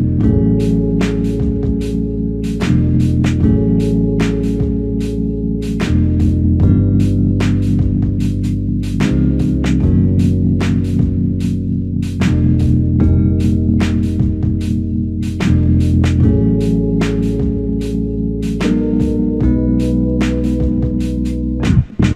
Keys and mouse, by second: 3.8 alt+click, 5.3 alt+shift+click, 9.3 typing, 11.4 double click, 13.7 alt+click, 15.8 double click, 16.3 alt+click, 19.2 double click, 19.8 alt+click, 21.2 double click.